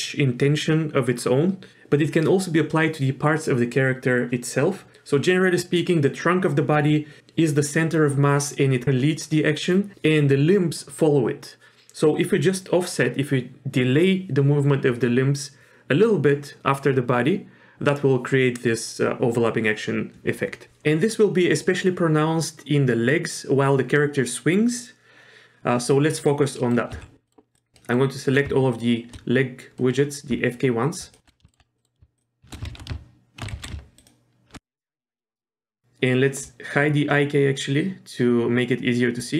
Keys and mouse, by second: 26.6 middle click, 26.9 z, 27.3 middle click, 27.8 middle drag, 28.8 shift+click, 29.8 middle click, 31.5 shift+middle click, 31.8 middle click, 32.2 shift+click, 33.7 ctrl+shift+z.